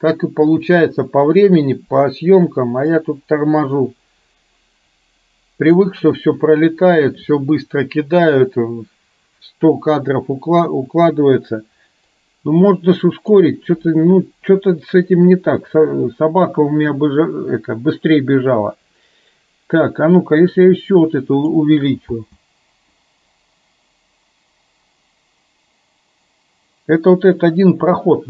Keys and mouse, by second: 3.2-5.8 drag, 12.1-13.3 drag, 20.5-21.6 drag, 22.2 space.